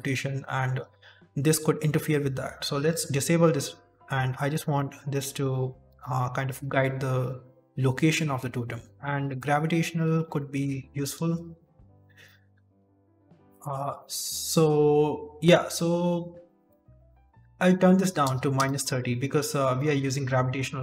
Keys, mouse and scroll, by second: 2.7 click, 9.2 click, 11.7 ctrl+s, 12.2 middle click, 13.0 click.